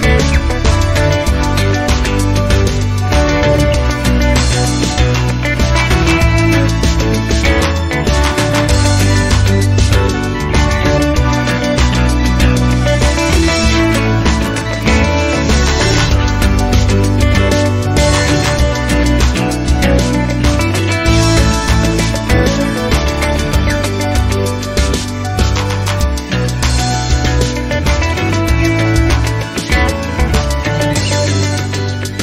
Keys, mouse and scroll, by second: 1.3 click, 2.8 click, 4.0 KP_Subtract, 5.9 click, 6.9 click, 8.1 scroll down 2, 11.9-12.4 drag, 13.0 KP_0, 14.6 click, 15.9 KP_Subtract, 17.6 click, 18.6 KP_0, 20.9 click, 22.0 click, 23.8 click, 25.0-25.3 scroll down 2, 30.1 click, 31.1 BackSpace.